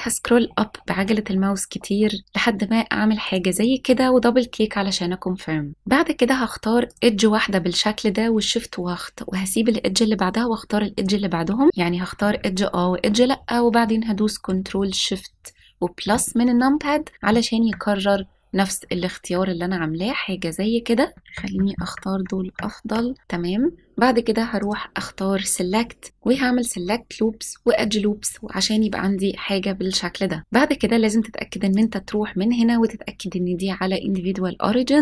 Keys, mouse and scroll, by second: 3.5 click, 5.7 shift+middle click, 5.7-6.6 scroll down 1, 6.8 click, 10.9 shift+click, 16.0 ctrl+shift+KP_Add, 21.1 ctrl+shift+KP_Add, 21.1 shift+click, 22.0 ctrl+shift+KP_Add, 24.5-28.0 drag, 30.4 right click, 30.4 s, 31.6-35.0 drag.